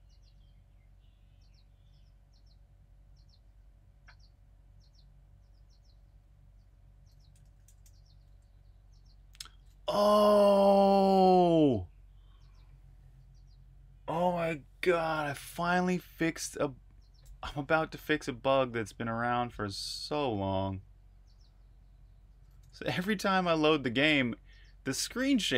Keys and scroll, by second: 7.0-8.2 typing, 23.3 super+r, 23.5-24.4 typing.